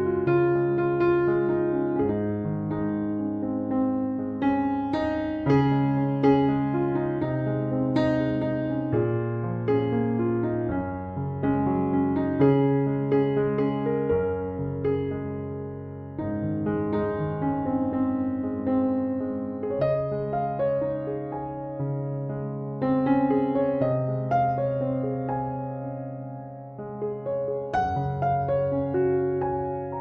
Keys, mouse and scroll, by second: 1.7-2.8 scroll up 1, 2.9 b, 6.6 scroll down 7, 6.6 b, 7.9 p, 10.6 Tab, 11.4 click, 13.4 shift+click, 15.6 ctrl+j, 17.7 click, 18.4 click, 18.6 click.